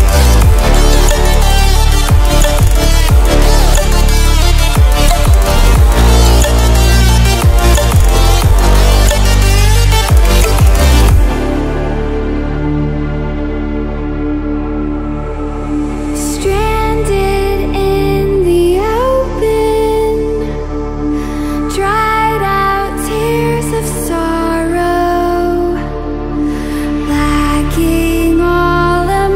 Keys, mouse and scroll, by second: 10.9-22.6 drag.